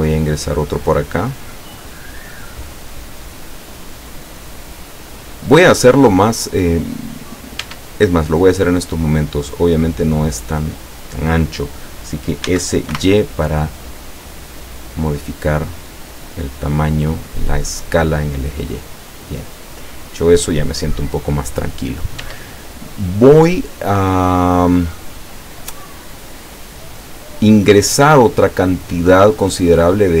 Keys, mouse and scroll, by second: 1.1 click, 4.4 click, 6.2-7.6 middle drag, 7.7 Tab, 8.9-10.3 middle drag, 12.5 s, 13.0 y, 16.4 click, 17.4-21.5 middle drag, 22.3 Tab, 26.9-30.2 middle drag.